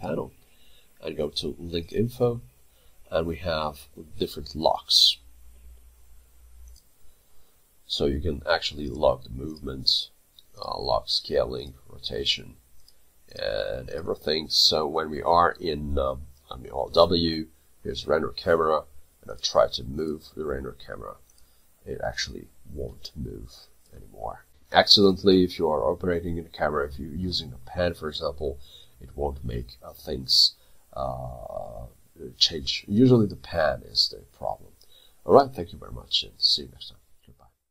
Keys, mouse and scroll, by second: 9.9 double click, 16.4 alt+w, 17.6 middle click, 24.5 Delete, 26.6 middle click, 27.8-28.5 scroll up 1, 29.3 middle click, 30.0 middle click, 30.9 alt+middle click.